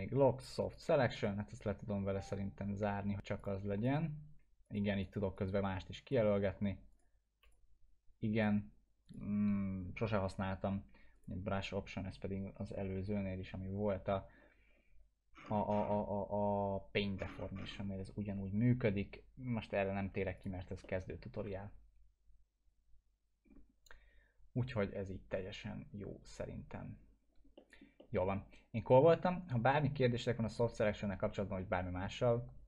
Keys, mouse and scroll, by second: 0.7 click, 3.4 click, 15.4 scroll down 1, 17.2-17.5 scroll up 1, 20.4 click, 20.9-21.5 alt+middle drag, 23.5-24.2 scroll up 2, 24.2-24.7 scroll up 1, 24.7-25.5 scroll up 1, 27.6 middle click, 28.0-29.3 alt+middle drag.